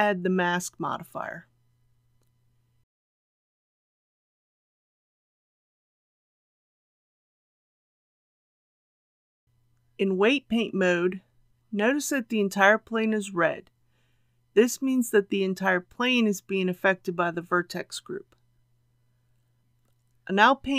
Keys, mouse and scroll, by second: 19.6 KP_1.